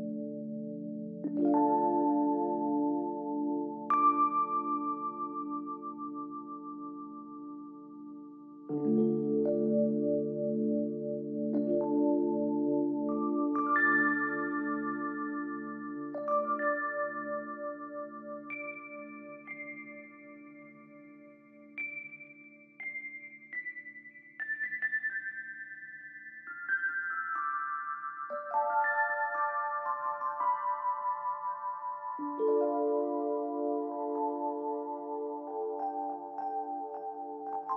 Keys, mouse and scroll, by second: 0.0-1.7 typing, 11.3 ctrl+-, 11.9 ctrl+-, 13.3 ctrl+-, 14.0 ctrl+=, 21.3 right click, 36.1 BackSpace, 36.3 Return, 37.6 double click.